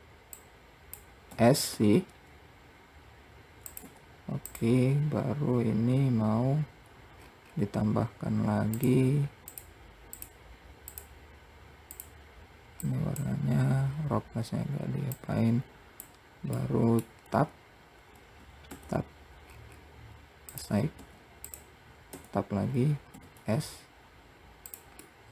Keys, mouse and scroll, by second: 0.7 click, 1.7 s, 7.5-7.8 scroll up 1, 9.1 click, 10.5-12.3 drag, 14.1-14.5 scroll down 3, 15.4-16.9 drag, 16.9 middle click, 19.0 Tab, 19.8 scroll up 4, 20.8 click, 22.5 Tab, 23.0-23.4 scroll up 3, 23.4 s.